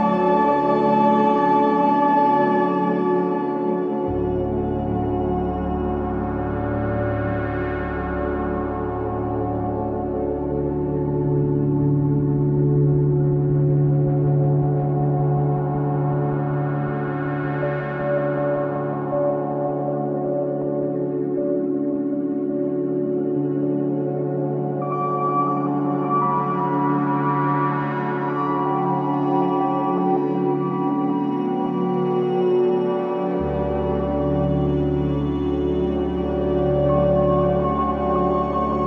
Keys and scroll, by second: 4.8 F1, 12.3 ctrl+d, 12.5 Escape, 21.7 4, 28.3 3, 29.3 ], 32.2 ], 34.5 ], 37.7 ].